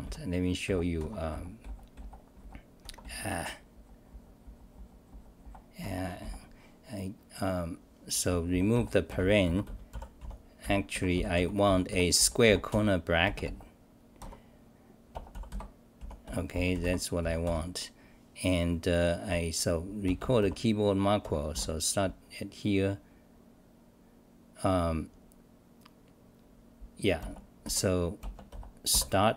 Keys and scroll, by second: 0.6 f, 1.0 Home, 1.3 f, 1.9 f, 2.8 Home, 3.0 f, 3.4 f, 4.7 f, 5.4 f, 5.8 Home, 6.2 f, 6.8-7.6 scroll up 7, 8.0-12.7 typing, 10.9 scroll, 11.6 scroll down 7, 15.8-17.9 typing, 18.4-19.0 scroll down 6, 21.2 Home, 21.5 d, 28.9 Delete.